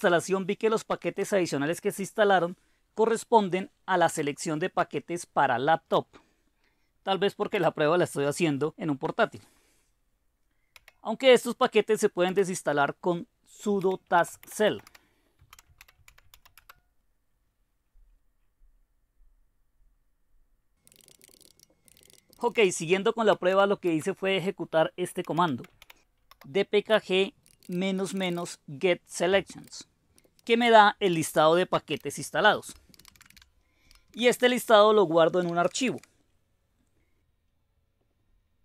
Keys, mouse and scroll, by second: 4.1 space, 5.9 Tab, 7.5 Return, 10.7 typing, 12.2 Return, 13.5-16.8 typing, 20.6-24.0 typing, 25.2-36.4 typing.